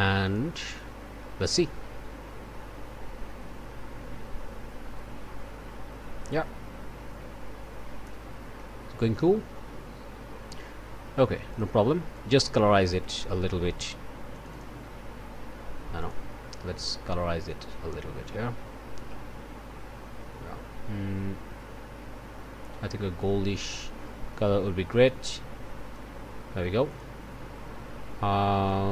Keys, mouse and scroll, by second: 0.2 click, 1.4 click, 11.5 click, 12.1-13.2 drag, 14.3 click, 16.0 click, 17.5-26.1 drag, 26.9 click, 28.7-28.9 drag.